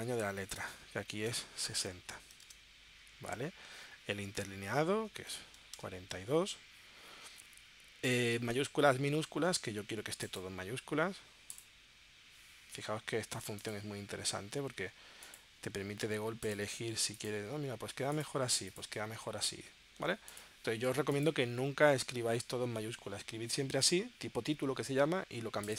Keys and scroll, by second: 1.3 6, 1.8 6, 2.3 0, 2.9 Tab, 5.1-6.0 typing.